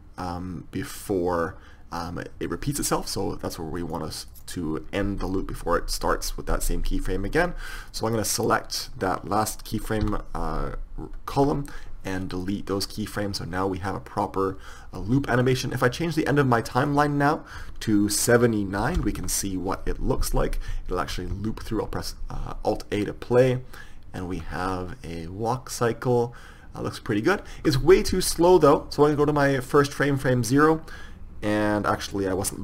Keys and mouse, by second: 8.0-12.8 drag, 12.8 x, 13.4 click, 21.3 alt+a, 27.9 Escape, 28.9-30.7 drag.